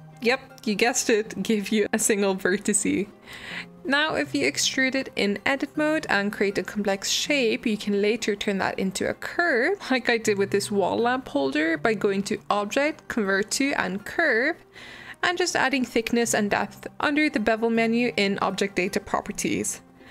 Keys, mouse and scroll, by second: 0.7 g, 2.8 Tab, 3.2 Tab, 3.4 click, 3.8 g, 6.3-7.6 shift+middle drag, 7.6 Tab, 9.1-11.6 drag, 11.6 right click, 12.7 click, 15.5-17.2 drag, 18.5 middle drag, 18.8 scroll down 2, 19.0-19.5 middle drag, 19.5-20.1 scroll up 1.